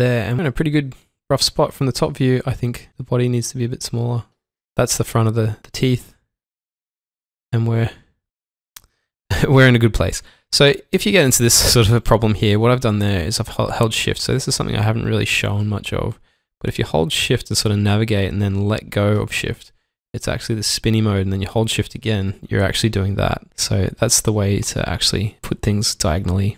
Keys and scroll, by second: 1.8-2.4 typing, 7.3 typing, 12.6 alt+Num_Lock, 22.0 shift+Num_Lock.